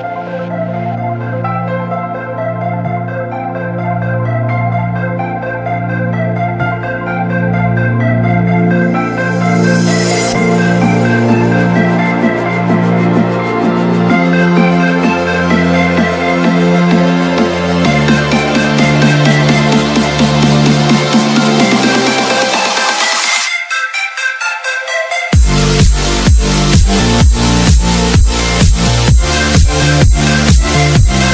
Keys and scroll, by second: 9.1 F3, 9.5 space, 9.9 F3, 11.2 Escape, 13.9 ctrl+g, 15.4 c, 16.0 shift+F2, 17.5 t, 17.7 r, 18.0 Escape, 20.0 F3, 20.6 F2, 27.0 l, 27.6 Escape.